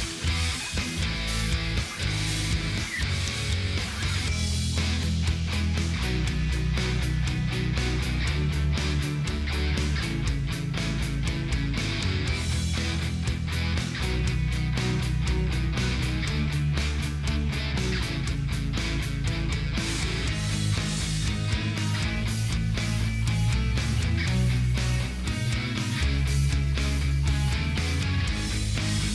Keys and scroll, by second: 26.4 ctrl+space.